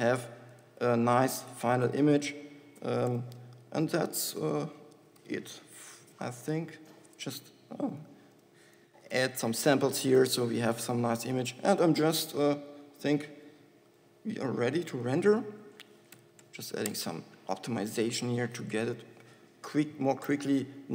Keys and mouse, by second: 5.0 click, 5.8 KP_2, 6.0 KP_0, 9.0 ctrl+c, 9.8 ctrl+v.